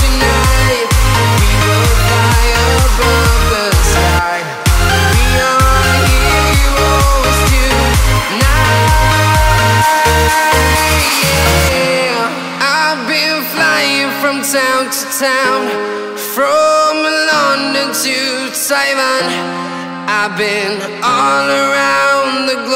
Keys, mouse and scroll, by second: 2.5 right click, 3.3 click, 7.5 click, 8.8 click, 10.5 right click, 11.5 right click, 12.3 click, 12.6 scroll down 1, 13.7 right click, 14.6 click, 15.2 click, 16.4 right click, 17.3 scroll down 1, 18.3-18.7 scroll up 1, 19.0 click, 22.2 click.